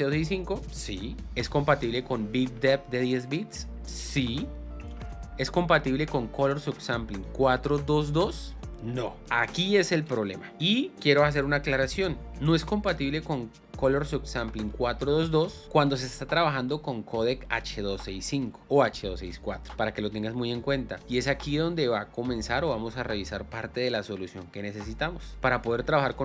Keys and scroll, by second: 1.2 space, 5.2 space, 8.6 space.